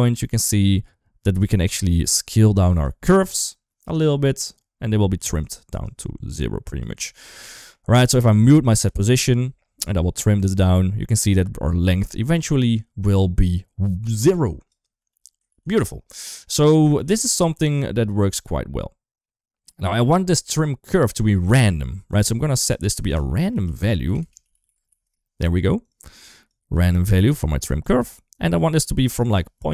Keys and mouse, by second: 5.0 ctrl+z, 5.6 click, 6.8 ctrl+z, 7.4 shift+middle click, 8.4 click, 8.7 m, 9.1 middle click, 10.1-14.6 drag, 14.8 ctrl+z, 15.3 ctrl+z, 16.1 shift+middle click, 17.7-19.6 drag, 20.2 shift+middle click, 22.0-25.7 drag, 24.0 BackSpace, 26.1 click, 26.9 click, 27.6 click, 29.0 click.